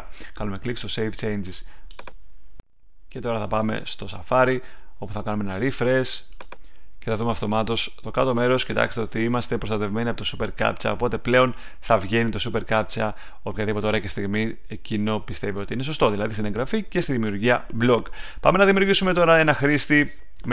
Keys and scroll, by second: 3.4 super+Tab, 18.5 super+Tab.